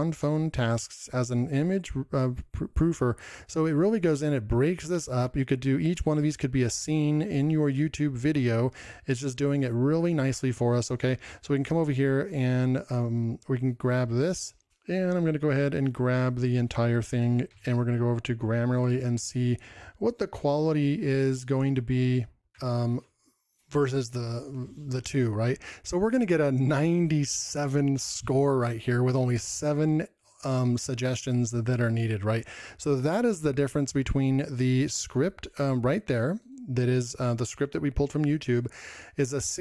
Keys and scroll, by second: 0.2 ctrl+m, 0.4 ctrl+m, 0.7 ctrl+m, 3.4 ctrl+m, 6.2 ctrl+m, 9.1 ctrl+m, 14.0 ctrl+m, 16.3 ctrl+m.